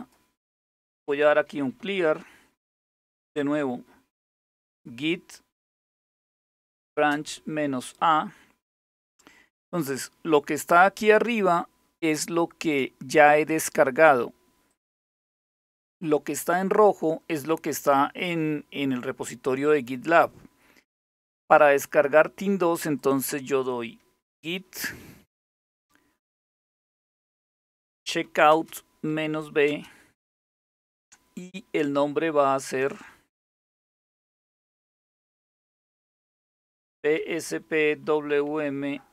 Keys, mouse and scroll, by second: 0.5-1.7 typing, 3.6-7.8 typing, 11.6-13.6 drag, 15.4 click, 22.6 click, 24.4-29.3 typing, 35.5-39.1 typing.